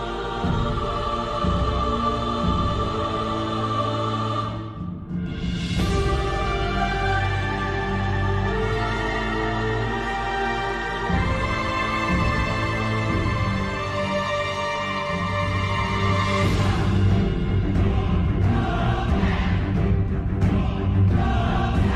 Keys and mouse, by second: 0.5 Tab, 1.2 shift+middle click, 1.8 a, 3.0 Tab, 5.0 middle click, 6.2 Tab, 7.0 KP_3, 7.4 a, 8.5 shift+click, 11.2 2, 13.7 shift+click, 14.8 s, 16.9-17.9 right drag, 18.9 ctrl+z, 20.0 ctrl+z, 21.2 ctrl+z.